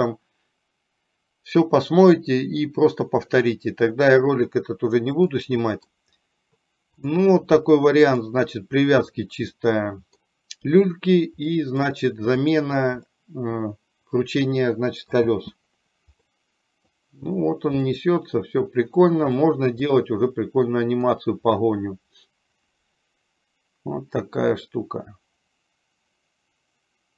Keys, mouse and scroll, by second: 5.5 middle click, 7.1 click, 8.4 middle click, 9.8 middle click, 11.6 middle click, 12.6 click, 13.3-15.5 middle drag, 15.5 space, 16.5 middle click, 18.1 middle click, 19.6-21.3 middle drag.